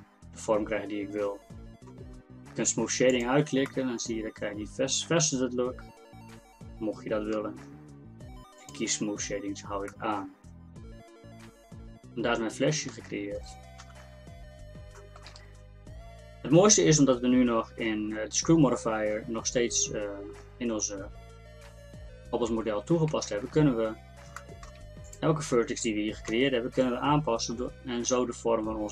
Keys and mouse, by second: 3.2-5.4 middle drag, 8.6-9.9 drag, 9.9 middle click, 11.5-12.6 drag, 13.9 KP_1, 17.0 middle click, 23.2 Tab, 24.1 middle click, 25.1-26.2 middle drag, 26.3 g, 27.0-28.9 middle drag.